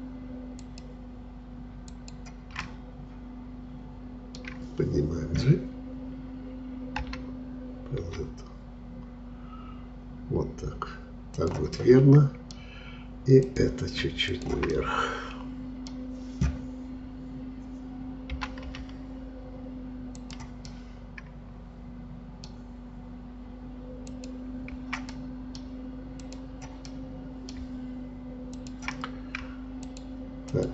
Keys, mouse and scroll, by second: 0.6-2.6 shift+drag, 2.6-5.7 middle drag, 7.0 g, 11.8-13.5 middle drag, 13.5-14.7 drag, 14.7-17.9 middle drag, 18.4 g, 20.7-23.7 middle drag, 24.1 click, 25.1-26.2 middle drag, 26.2 click, 26.9-28.6 middle drag, 28.6-30.7 shift+drag.